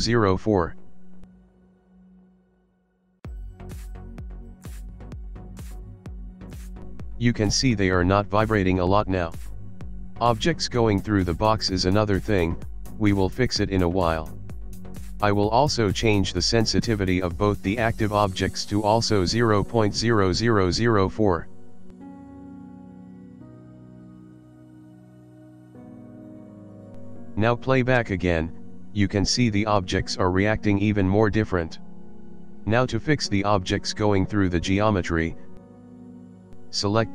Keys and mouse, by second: 1.8 KP_0, 6.1 click, 12.8 click, 13.6 click, 17.0 click, 17.9 click, 19.3 KP_0, 21.8 click, 22.7 click, 25.0 KP_0, 27.3 click, 28.2 click, 35.6 click.